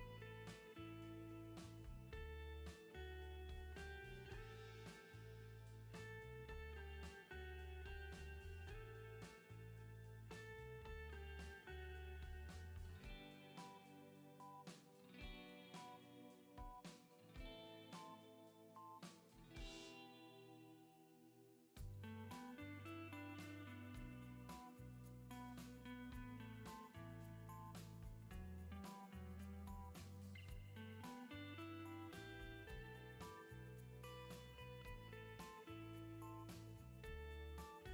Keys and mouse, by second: 1.4 ctrl+z, 3.5 Tab, 6.7 Tab, 7.1 middle click, 8.3 middle click, 8.5 middle click, 8.6 shift+click, 8.7 shift+middle click, 9.8 middle click, 10.9 middle click, 12.0 middle click, 13.1 shift+middle click, 13.7 alt+q, 13.8 click, 15.5 ctrl+z, 16.6 click, 17.1-17.7 drag, 20.6 click, 20.9 click, 21.3 click, 21.6 middle click, 23.3 click, 24.5 shift+click, 25.4 middle click, 26.0 shift+click, 27.2 middle click, 27.5 middle click, 27.8-29.2 drag, 29.2 middle click, 29.4 click, 30.9 ctrl+z, 31.5 middle click, 32.4 click, 32.7 click, 33.0 click, 33.8 click, 34.0 middle click, 34.6 shift+middle click, 35.1 middle click, 36.0 middle click, 36.2 middle click, 36.6 shift+middle click, 37.4 click.